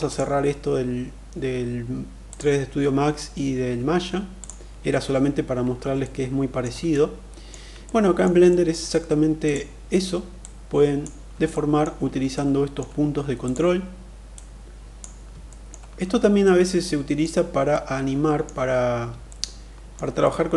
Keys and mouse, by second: 5.8 alt+middle click, 6.6 middle click, 7.6 middle click, 8.2 shift+middle click, 10.1 click, 11.3 alt+middle click, 12.0 middle click, 14.1 click, 15.2 alt+middle click, 16.1 middle click, 17.5 middle click, 19.0 alt+middle click, 19.9-20.5 middle drag.